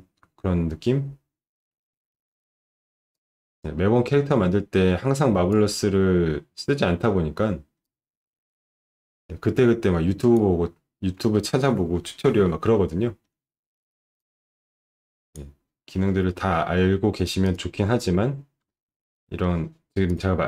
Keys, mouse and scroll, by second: 0.2-0.5 scroll up 1, 3.2-5.5 drag, 8.0-10.3 drag, 12.5 middle click, 14.3-15.3 drag, 17.5 click, 18.7 alt+middle click, 20.1 click.